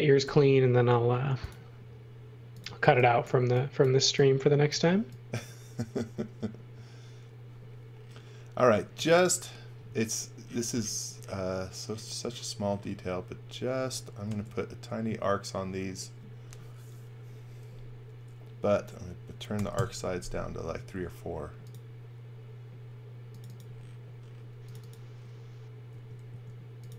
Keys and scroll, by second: 0.2 l, 2.8 e, 6.1 space, 8.8 x, 14.2 a, 19.5 4, 19.7 Return, 25.8 space, 26.2 a.